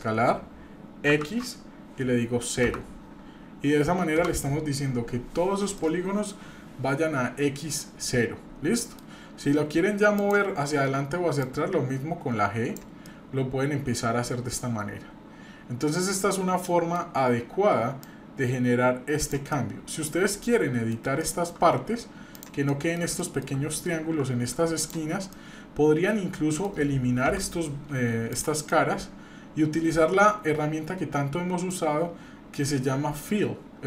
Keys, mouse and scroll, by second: 5.8-9.0 middle drag, 10.2 click, 11.4-12.8 drag, 13.1-17.0 middle drag, 18.0-19.3 drag, 19.5 middle click, 20.1 scroll up 2, 20.4 middle click, 21.2 shift+middle click, 21.6 scroll up 1, 22.3 click, 22.7 middle click, 23.2 shift+middle click, 23.6-23.9 scroll up 2, 24.8 shift+click, 25.3-26.7 middle drag, 27.3 Delete, 28.7-31.7 middle drag.